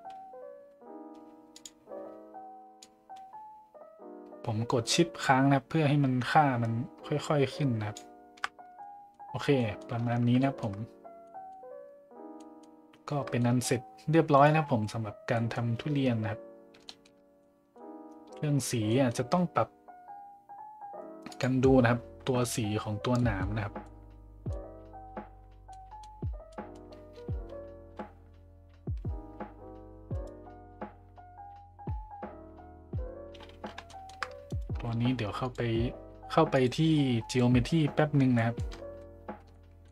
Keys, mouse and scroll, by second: 1.5 shift+click, 2.9-8.0 shift+drag, 8.8-9.1 middle drag, 9.5 middle drag, 10.4 shift+middle drag, 11.2 middle drag, 12.4 middle drag, 13.4 middle drag, 15.3 middle drag, 16.8 shift+middle drag, 17.4-17.7 middle drag, 18.9 middle drag, 21.3 click, 23.1 middle drag, 23.4-23.8 scroll up 1, 23.8-24.5 middle drag, 25.7-26.0 middle drag, 26.5 middle drag, 33.9 shift+middle drag, 34.7 a, 35.5-35.8 drag, 36.5-37.4 drag, 38.6 middle click, 39.5-39.9 shift+middle drag.